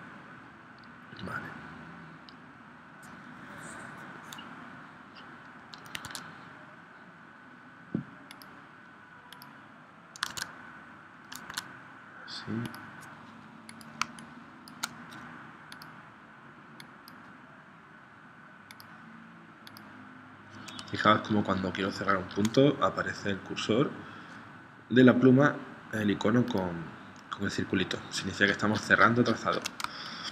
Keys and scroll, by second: 5.9 super+Tab, 10.2 super+Tab, 11.5 super+Tab, 14.0 space, 29.9 space.